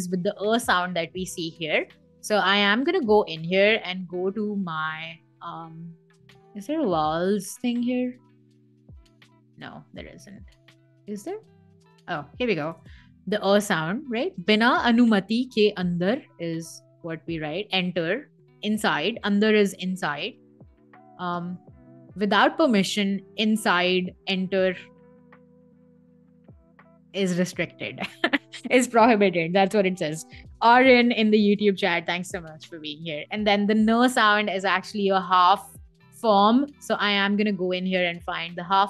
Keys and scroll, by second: 14.0 space, 20.9 space.